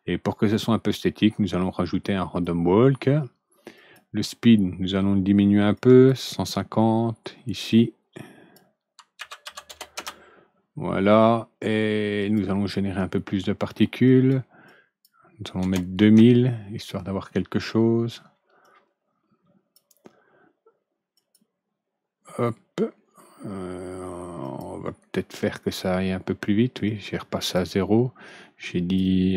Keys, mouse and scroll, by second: 0.6-2.4 drag, 3.7 click, 5.7 click, 7.6 click, 9.1 ctrl+Return, 12.1 click, 13.6 click, 14.0 click, 14.6 click, 15.6 ctrl+Return, 18.6-19.7 drag, 21.1 click, 24.4 click, 26.8 click, 28.2 click.